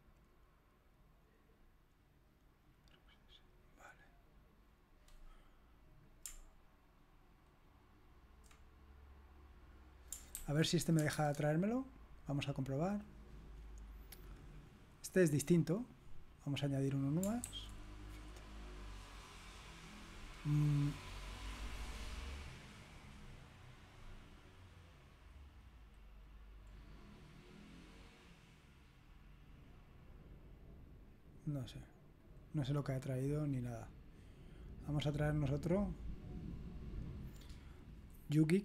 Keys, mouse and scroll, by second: 2.9 click, 6.0 click, 6.4 click, 10.8 ctrl+c, 11.3 alt+Tab, 14.5-16.4 drag, 18.2 ctrl+v, 18.2 click, 23.2-23.5 scroll up 1, 23.5-24.4 scroll down 1, 24.9 click, 26.8 scroll down 2, 26.9-29.7 scroll up 2, 29.7 click, 32.4 click, 32.8 click, 34.2 click, 34.9 click, 37.7 click.